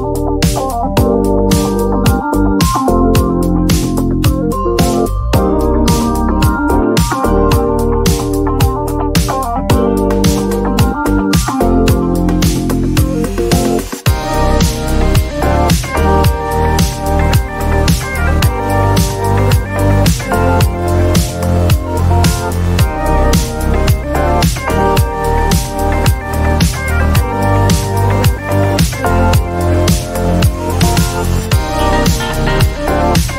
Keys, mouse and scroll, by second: 0.1 click, 1.3 click, 2.8-7.8 typing, 8.6 Return, 11.6-13.4 typing, 17.6 click, 20.3 click, 26.3 click, 29.0 click, 29.7 click, 31.6 click, 33.1 click.